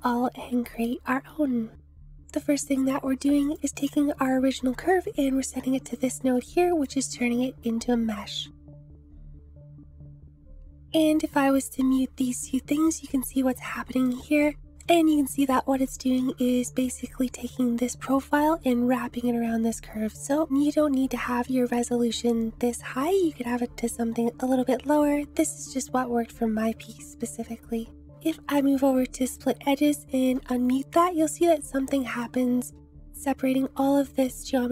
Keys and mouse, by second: 3.4 click, 5.8 click, 11.3 m, 13.7 shift+middle click, 14.4 click, 14.8-15.8 drag, 16.3-16.8 shift+drag, 27.1 click, 30.2 m, 32.2-32.7 shift+drag.